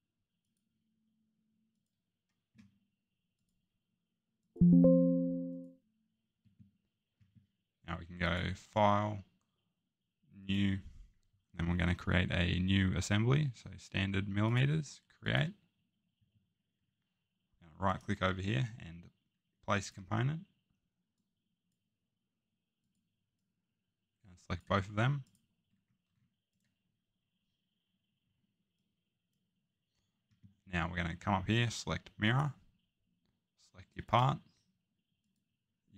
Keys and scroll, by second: 28.2 Escape.